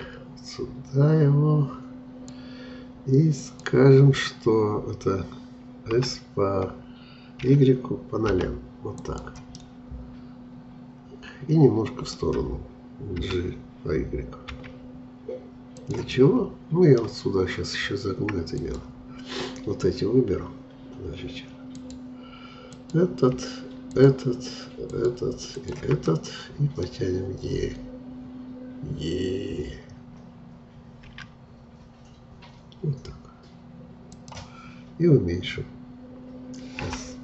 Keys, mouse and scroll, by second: 6.0 s, 9.5-12.6 middle drag, 13.2 g, 16.1-17.4 middle drag, 17.4-17.7 scroll up 1, 18.5-21.5 drag, 21.7-26.0 drag, 26.0-29.1 middle drag, 31.1 e, 36.8 s.